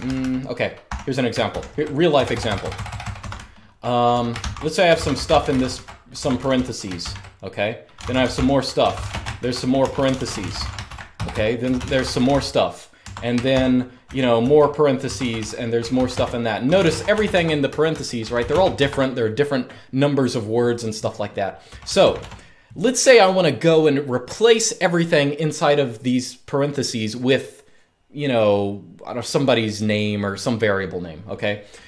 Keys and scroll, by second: 0.0-19.1 typing, 21.4-21.9 typing.